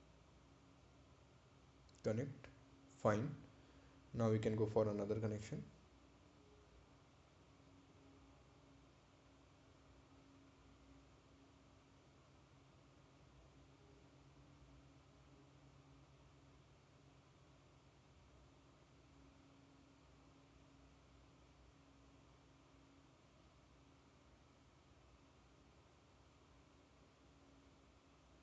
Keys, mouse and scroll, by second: 0.8 scroll down 1, 5.5 right click, 7.0 ctrl+click, 7.7 scroll up 1, 10.5 click, 14.2 click, 20.3 click, 27.6 click.